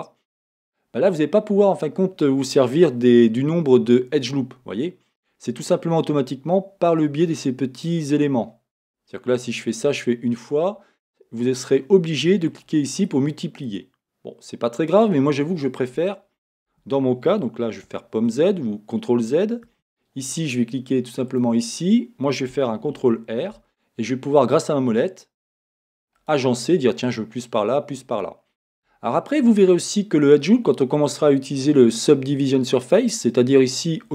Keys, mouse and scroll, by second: 1.3-2.4 scroll down 2, 2.4-7.1 scroll down 1, 9.8-10.8 drag, 12.5-21.5 drag, 16.7 Escape, 17.9 z, 19.7 Escape, 23.0 ctrl+r, 28.7 click, 28.8 Escape, 29.6-34.1 middle drag.